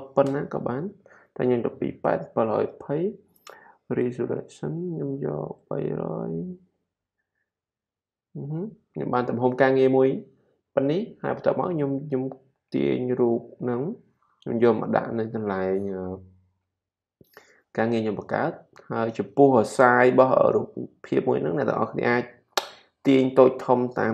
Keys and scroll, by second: 0.0-0.7 typing, 5.4-6.4 typing, 19.5 super+t.